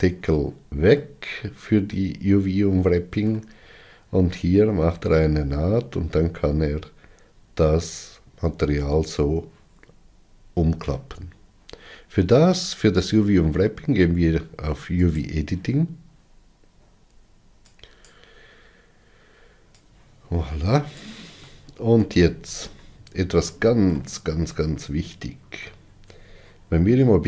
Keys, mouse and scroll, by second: 14.9-18.0 drag, 19.8-21.4 drag, 21.4 shift+middle click, 22.3-23.3 scroll down 20, 23.4-25.9 shift+middle drag, 25.9 Tab.